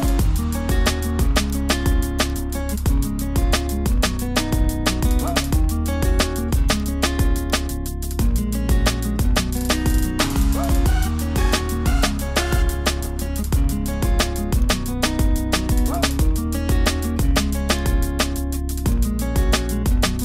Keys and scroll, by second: 3.7 super+i.